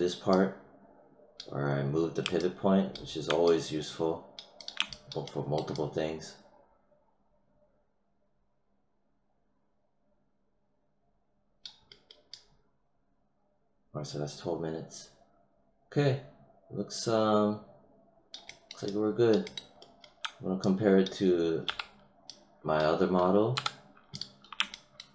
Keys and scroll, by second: 21.6 w, 23.5 h.